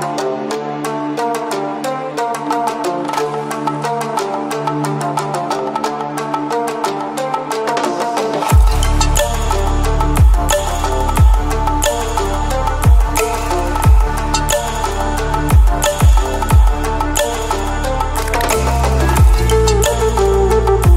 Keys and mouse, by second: 0.0-4.9 typing, 5.6 click, 7.9-15.7 typing, 16.7-19.6 typing, 20.8 click.